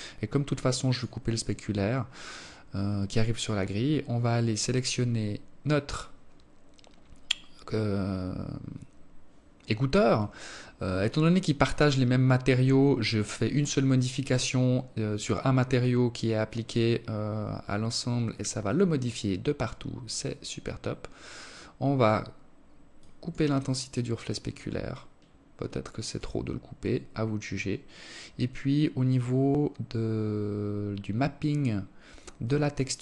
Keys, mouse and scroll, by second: 1.7-2.9 scroll up 15, 3.5-4.9 scroll up 1, 4.9-5.3 scroll down 2, 20.2 click, 21.2 click, 24.3 click, 25.3-25.8 scroll up 3, 29.9-30.5 scroll up 10, 31.1-31.9 scroll down 1, 31.9 click, 31.9 scroll down 1, 32.3 click, 32.8 click.